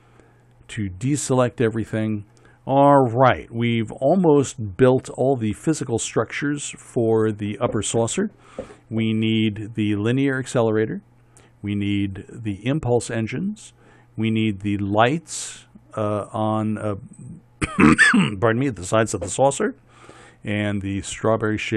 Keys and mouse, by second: 1.1-21.7 middle drag.